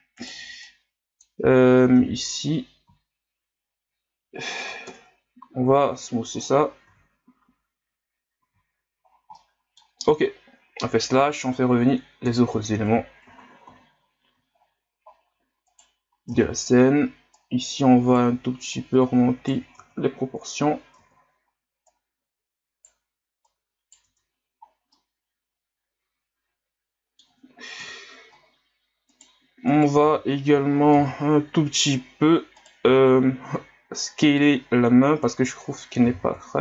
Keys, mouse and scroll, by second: 0.2 right click, 0.3 b, 2.0 x, 2.8 w, 4.9 ctrl+KP_Add, 5.7 w, 6.9 z, 7.3-8.1 scroll down 4, 8.4 a, 9.1 scroll down 1, 9.4-10.8 middle drag, 10.8 KP_Divide, 12.2 KP_1, 12.7 ctrl+s, 13.3 Tab, 13.7 a, 14.5-15.2 ctrl+scroll up 15, 15.7 right click, 16.3 Tab, 16.8 scroll up 2, 17.3 right click, 18.7 right click, 19.8 Tab, 21.0 Tab, 21.9 right click, 23.5 right click, 24.1 Tab, 24.6 scroll down 3, 24.9-27.8 middle drag, 27.8 KP_1, 29.1 right click, 29.7 right click, 30.1 z, 30.7 ctrl+scroll up 1, 30.9 Tab, 32.6 right click, 32.8 b, 36.1 s.